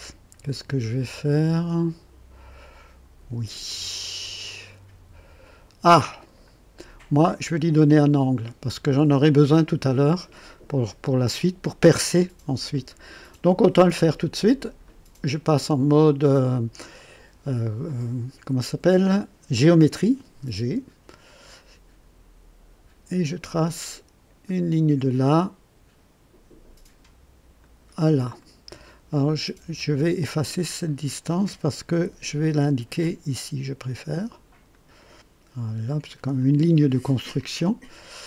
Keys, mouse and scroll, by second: 3.0 click, 14.6 click, 21.2 click, 24.4 click, 27.6 click, 28.4 right click, 29.1 right click, 29.8 right click, 30.8 click, 31.9 Delete, 34.7 click, 36.3 click, 37.3 click.